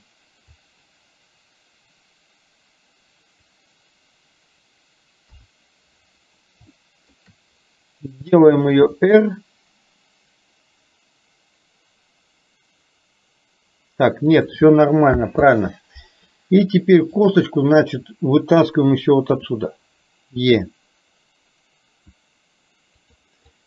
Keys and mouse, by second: 5.3 KP_1, 6.9 shift+middle click, 8.9 r, 15.4 ctrl+z, 17.3 click, 19.5 e, 23.5 click.